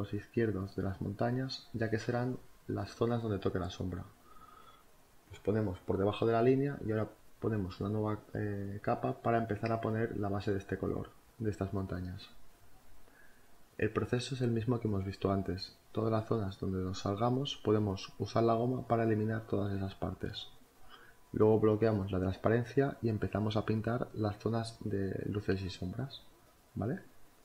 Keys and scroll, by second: 3.8 b, 12.4-13.7 typing, 15.8 b, 16.5 b, 19.5-22.1 typing, 25.0 ctrl+z, 25.9 b, 27.0 z.